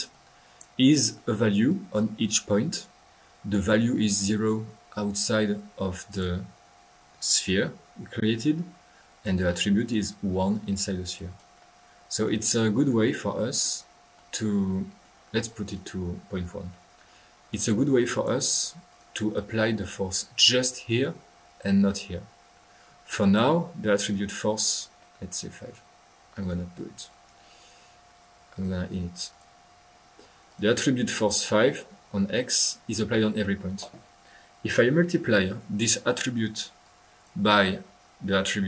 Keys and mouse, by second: 0.1-0.7 drag, 0.8-1.3 middle drag, 1.7 click, 4.1 click, 6.1-6.5 drag, 9.0 click, 9.4 middle click, 11.1 click, 15.5-15.9 drag, 16.2 drag, 16.2 typing, 16.7-17.6 middle drag, 17.6-18.4 drag, 18.8 drag, 19.3-19.9 middle drag, 23.0 click, 24.0 click, 26.7 click, 27.4 click, 28.5 click, 29.2 click, 30.4 click, 31.1 click, 32.5 middle click, 35.5-36.3 drag, 36.8 click.